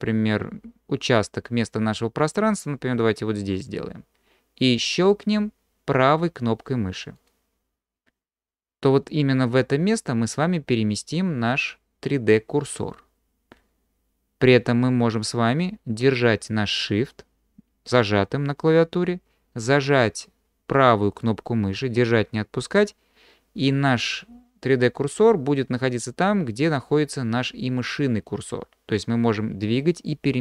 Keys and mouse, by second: 7.2 shift+click, 21.3-30.4 shift+drag.